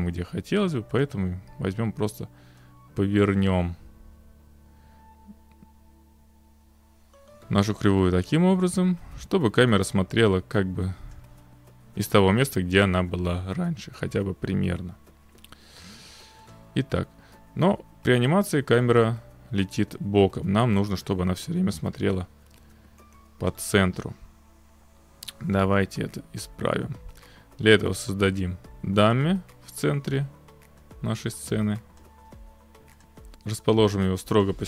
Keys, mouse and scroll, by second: 1.0 click, 11.1 click, 16.5 click, 23.5 click, 28.0 click, 29.2 click, 32.0 click, 33.1 click, 33.7 click, 34.5 click.